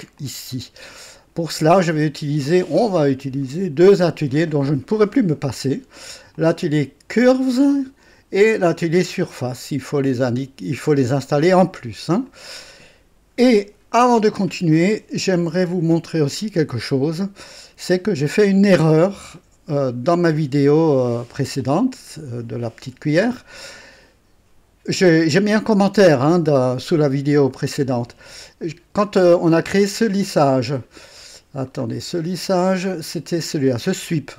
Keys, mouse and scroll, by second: 0.2-1.5 drag, 1.6 right click, 2.4 click, 3.4 right click, 6.3 click, 12.2 click, 18.7 scroll up 2, 19.3 right click, 29.3 click, 31.3-31.9 scroll down 2, 33.1 click.